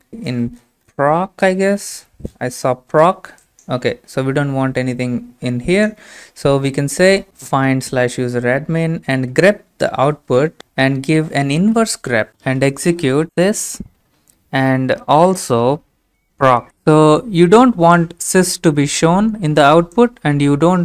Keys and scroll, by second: 13.2-14.1 typing, 16.1-17.2 typing.